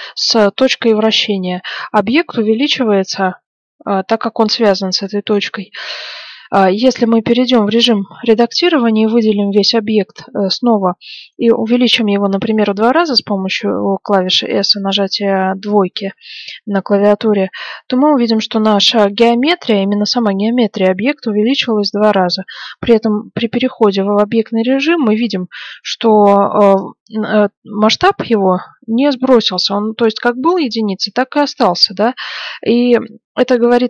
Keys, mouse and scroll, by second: 6.6-8.3 middle drag, 7.0 Tab, 8.1 a, 8.3 a, 11.3 s, 21.0 Tab, 24.4 b, 33.0-33.8 middle drag.